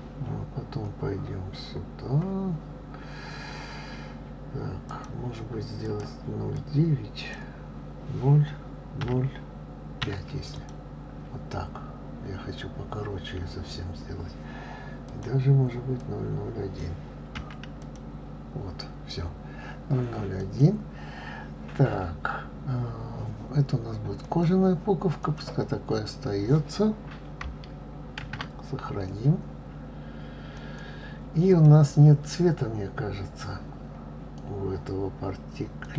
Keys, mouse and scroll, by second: 2.3 scroll up 2, 3.7-6.0 scroll up 6, 6.0-9.1 drag, 16.2-19.0 drag, 21.5 click, 25.3 click, 26.3 click, 29.3 ctrl+s, 31.7 click, 32.6 click.